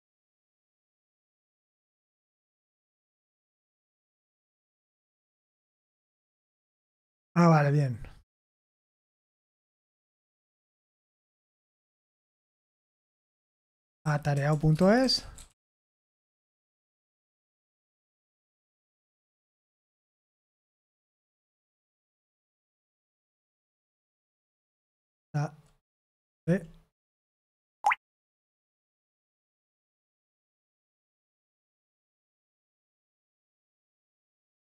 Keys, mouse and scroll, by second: 0.0-3.9 typing, 4.3 Return, 8.9-32.3 typing, 16.8 Escape, 24.4 Escape, 27.3 Escape, 30.9 Escape, 33.8 click.